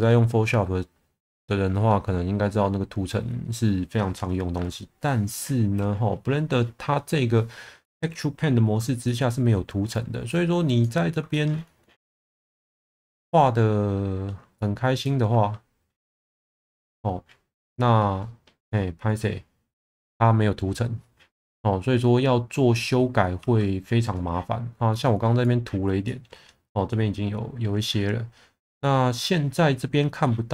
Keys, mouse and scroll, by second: 9.0 shift+middle click, 11.3 shift+middle click, 12.6 1, 15.2 Tab, 23.4 Tab, 26.0 middle click.